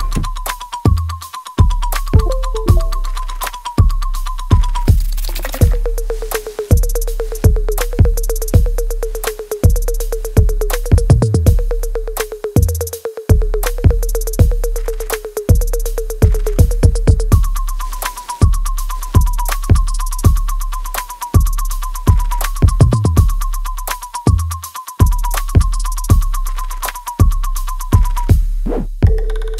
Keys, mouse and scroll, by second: 0.4 ctrl+z, 1.4 ctrl+click, 2.6 alt+right click, 3.1 alt+middle click, 4.2-12.4 ctrl+drag, 12.4 r, 13.1 click, 14.2 w, 14.5-16.4 drag, 16.4 r, 17.0-18.6 drag, 18.6 w, 19.0-20.3 drag, 20.3 right click, 21.3 click, 21.8 alt+right click, 22.9 click, 23.2-25.2 alt+right drag, 25.2 click, 27.4 right click, 28.7-29.5 alt+right drag.